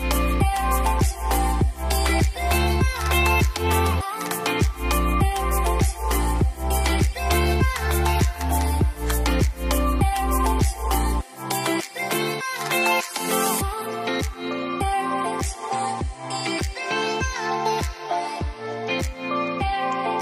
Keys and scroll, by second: 3.7 w, 5.5 e, 15.1 Delete.